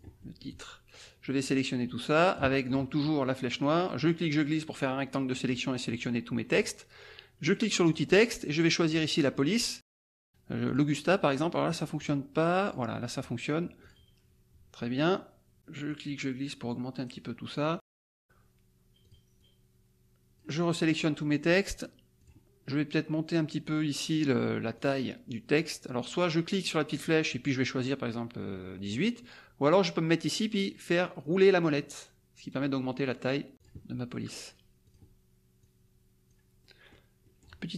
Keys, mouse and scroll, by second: 0.2 middle click, 1.0-2.5 drag, 2.6 click, 3.5 click, 4.0-5.6 drag, 7.8 click, 8.9 click, 10.6 click, 11.6 click, 12.0 click, 12.6 click, 13.9 click, 16.0-17.2 drag, 19.0 click, 19.3-20.5 drag, 22.2 click, 24.7 click, 26.5 click, 26.9 click, 28.8 click, 30.5-31.1 scroll down 2, 31.1-31.5 scroll up 2, 31.7 scroll up 2, 33.2 scroll up 1, 33.5 click, 34.8 click, 35.6 click, 36.6-37.6 middle drag.